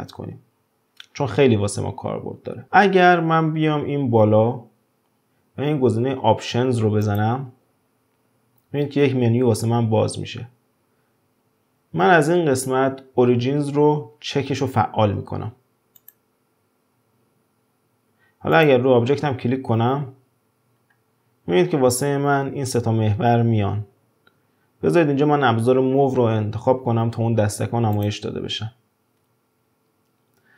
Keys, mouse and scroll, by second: 2.0-2.3 scroll down 2, 7.0 click, 18.5 click, 20.9-23.6 scroll up 2, 23.6-24.3 scroll up 1, 27.9-29.2 drag.